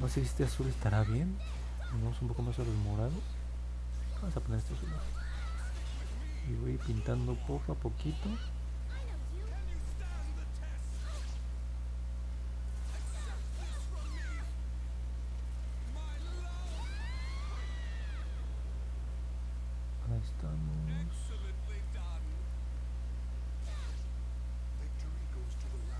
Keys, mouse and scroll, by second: 6.3 click, 7.8 click, 8.9 click, 9.4 click, 10.9 click, 11.4 click, 11.9 click, 13.4 click, 18.4 click, 19.3 click, 20.2 click, 22.9 click, 23.5 click, 24.6 click.